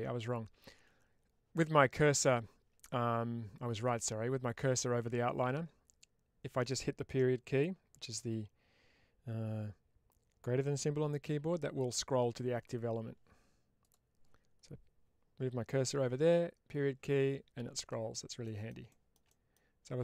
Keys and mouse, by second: 13.7-16.2 drag, 18.3 middle click, 18.8 shift+middle drag, 19.2 middle click.